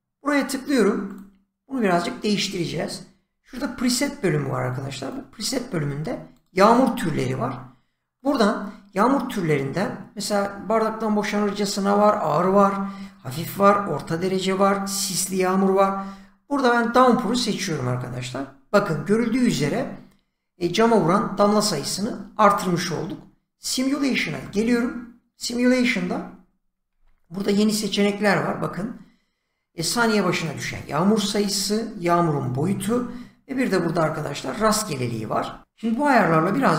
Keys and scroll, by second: 3.3 <, 6.7 <, 26.8 typing.